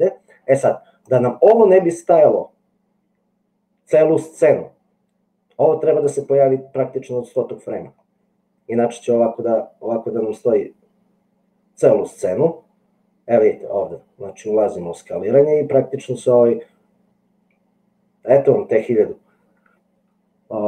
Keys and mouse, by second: 7.6-20.6 drag.